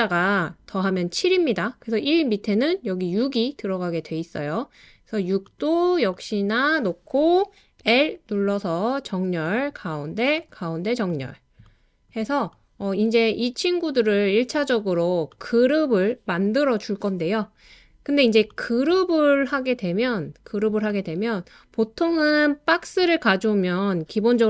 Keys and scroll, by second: 7.8 typing.